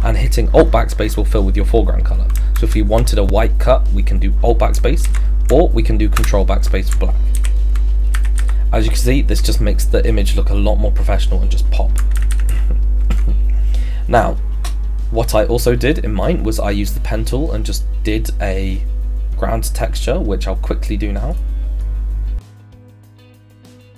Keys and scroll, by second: 2.6 alt+BackSpace, 4.7 ctrl+BackSpace, 5.0 ctrl+z, 6.2 ctrl+BackSpace, 7.4 ctrl+d.